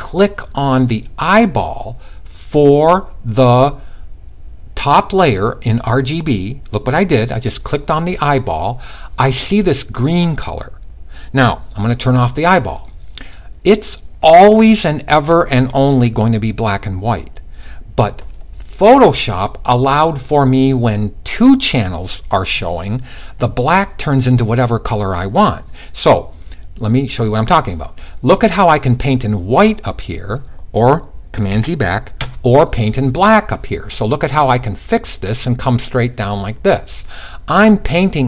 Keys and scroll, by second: 31.1 super+z, 31.7 super+x.